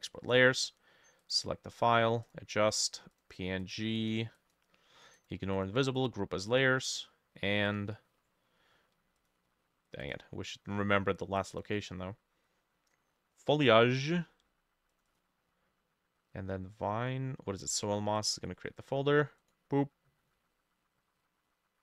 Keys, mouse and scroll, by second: 2.8-8.0 drag, 10.1-13.6 drag, 15.1-17.1 drag.